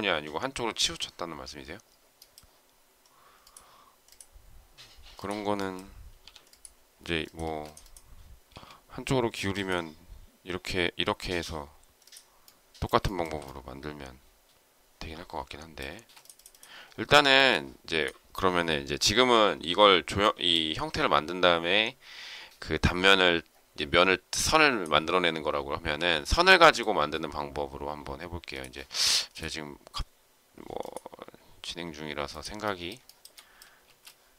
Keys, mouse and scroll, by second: 7.4 space, 8.4 s, 13.0 shift+middle click, 15.9 space, 25.7 Delete, 33.0 shift+middle click, 33.8 space.